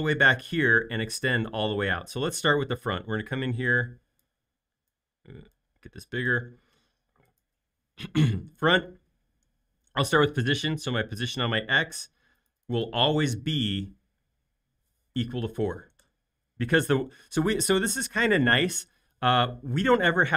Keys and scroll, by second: 15.2-15.9 typing, 16.0 Return.